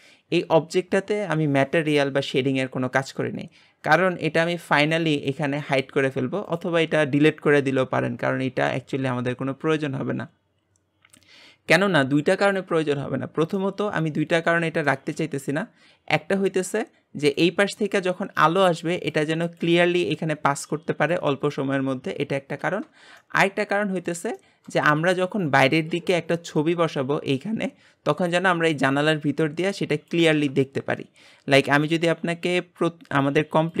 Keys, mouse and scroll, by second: 5.6 click, 6.0 click, 6.4 click, 13.7-33.8 middle drag.